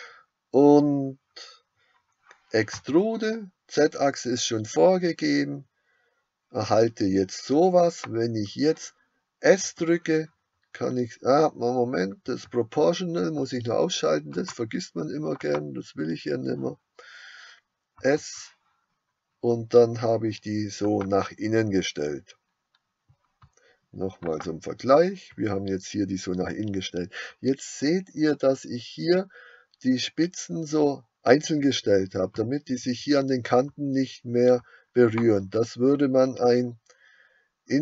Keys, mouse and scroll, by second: 2.7 e, 9.7 s, 15.6 click, 18.1 s, 20.9 s, 24.5 click, 35.2 click.